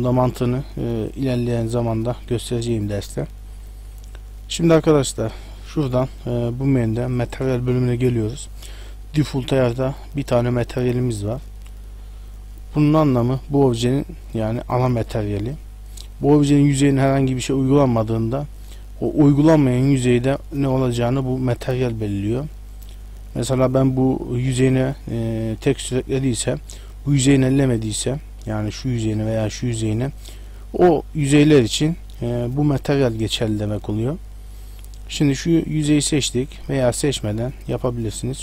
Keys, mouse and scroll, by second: 3.3 middle click, 3.7 scroll up 1, 7.2 click, 14.1 Tab, 16.2 middle click, 17.9 shift+middle click, 18.8 middle click, 23.4 Tab, 26.6 Tab, 28.0 Tab, 28.5 right click, 29.3 right click, 30.0 Tab, 33.5 Tab, 34.1 middle click, 35.0 right click, 35.9 shift+middle click, 36.7 a.